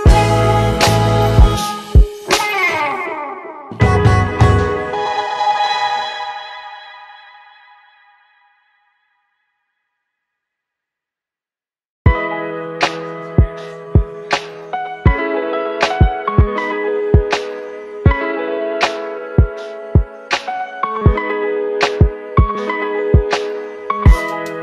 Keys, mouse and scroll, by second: 6.0-7.5 typing, 8.5-10.1 click, 12.9 Return, 18.1 click, 23.0 click.